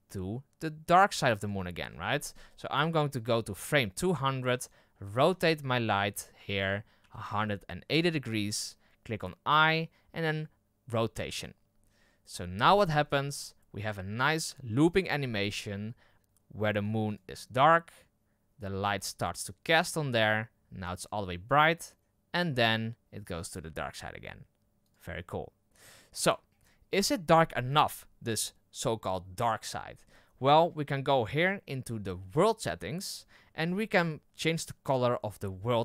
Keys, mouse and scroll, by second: 1.8-3.0 scroll down 11, 2.1 middle drag, 4.5 right click, 4.9 r, 10.9 i, 12.7 KP_0, 17.1-20.1 drag, 24.8-26.9 drag, 26.9-27.3 scroll up 8, 35.5-35.8 scroll up 1.